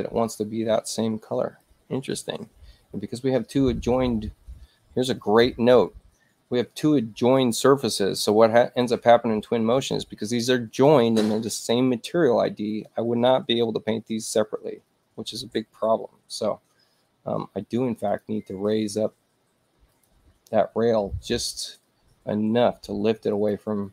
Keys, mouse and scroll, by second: 16.7 space, 18.1 click, 19.9 ctrl+click, 23.3 ctrl+click.